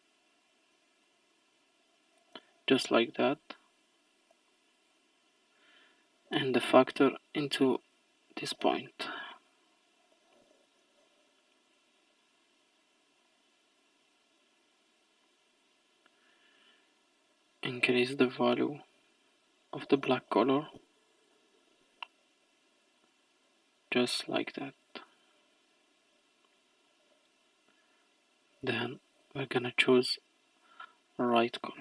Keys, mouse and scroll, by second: 1.1 click, 3.4 middle click, 4.1-4.5 scroll down 2, 4.5-5.2 middle drag, 5.2 scroll down 1, 5.2-6.1 scroll up 6, 7.4-7.9 drag, 9.2-10.6 scroll down 4, 10.6-11.3 scroll down 1, 11.3-12.0 middle drag, 12.0-13.3 scroll up 13, 13.3-14.2 middle drag, 14.2-15.1 scroll up 1, 15.1 scroll up 1, 15.3-16.7 middle drag, 16.7-19.7 drag, 23.0-25.5 drag, 25.5-27.1 scroll down 8, 27.1 middle click, 27.9-29.1 scroll up 5, 29.1 click.